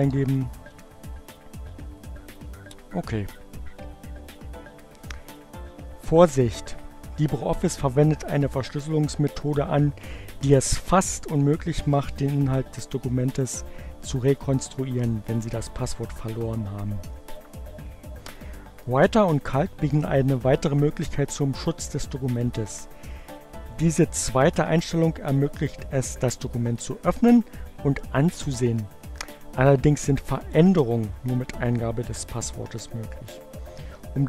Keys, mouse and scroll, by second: 1.5 click, 2.6-3.6 typing, 4.6 click.